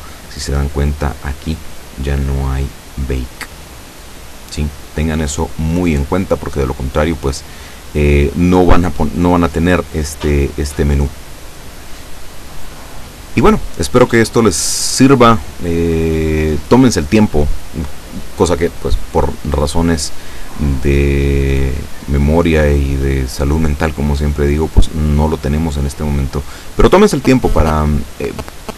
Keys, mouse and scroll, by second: 0.1-0.5 scroll down 1, 0.8-1.4 scroll up 1, 1.5-2.1 scroll down 2, 2.8 click, 3.0 scroll down 1, 3.9-4.2 scroll up 1, 4.5-4.9 scroll up 2, 5.1-5.4 scroll up 2, 9.1-9.8 scroll down 4.